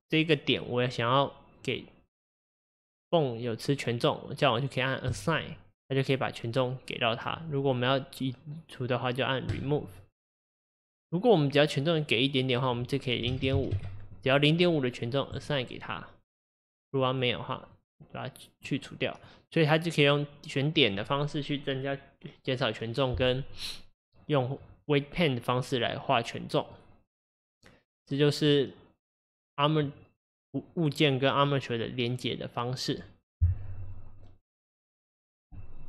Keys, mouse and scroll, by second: 5.1 click, 6.0-9.1 middle drag, 9.5-20.1 drag, 20.1-23.1 middle drag, 26.8-29.8 middle drag.